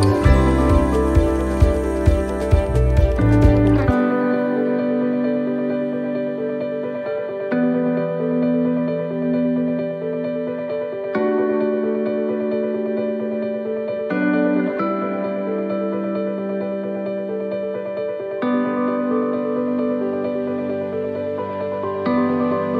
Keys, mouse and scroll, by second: 0.1 middle click, 2.2 scroll down 1, 3.8 click, 5.2 click, 5.9 middle click, 6.2 scroll down 1, 6.8 middle click, 6.8 scroll down 2, 8.1 scroll down 1, 8.9 middle click, 10.0 shift+middle click, 10.9 middle click, 14.9 shift+middle click, 15.5 scroll up 1, 16.4 scroll up 2, 16.4 middle click, 17.8 shift+middle click, 17.8 right click, 18.6 alt+shift+right click, 20.0 alt+shift+right click, 20.7 alt+shift+right click, 21.8 ctrl+z, 22.3 alt+shift+right click.